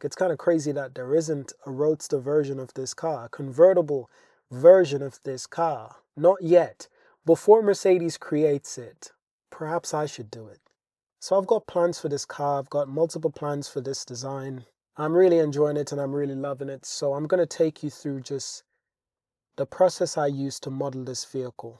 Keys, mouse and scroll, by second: 11.1 click, 11.8 click, 13.0 shift+drag, 13.2-13.9 middle drag, 15.2 shift+drag, 15.4 middle click, 16.5-17.0 shift+drag, 17.0-18.2 middle drag, 18.2 click, 20.3-20.7 shift+middle drag.